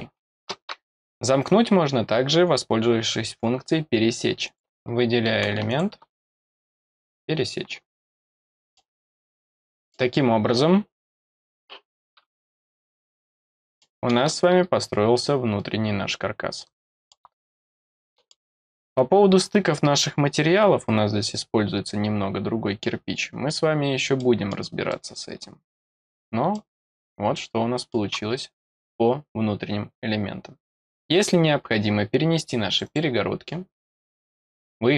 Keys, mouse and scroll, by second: 4.4 click, 5.6 click, 6.7 click, 8.4 middle click, 9.1-9.5 scroll down 1, 9.5 middle click, 13.1 middle click, 14.2-17.0 middle drag, 17.6 middle click, 19.1 scroll down 1, 19.7 scroll up 1, 21.5-21.9 scroll down 2, 22.8-24.1 scroll down 3, 24.1 middle click, 24.8-25.9 middle drag, 26.1 scroll down 1, 26.5-27.9 middle drag, 32.6 click, 34.2 click.